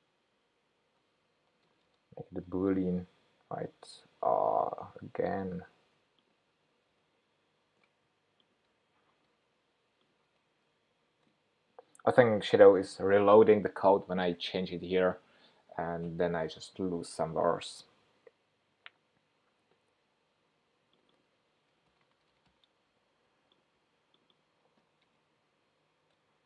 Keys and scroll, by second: 1.7 Return, 2.7 shift+super+p, 7.5 shift+super+p.